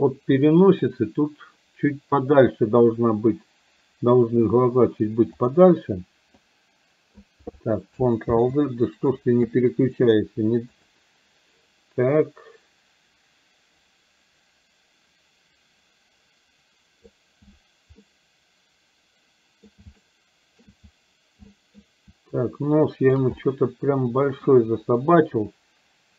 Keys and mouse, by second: 0.4 middle click, 5.5 click, 6.4 click, 8.5 ctrl+z, 10.9 click, 12.3-17.3 drag, 18.0-19.8 middle drag, 20.0 shift+middle click, 21.5 middle click, 22.4 shift+click, 23.4-24.5 middle drag.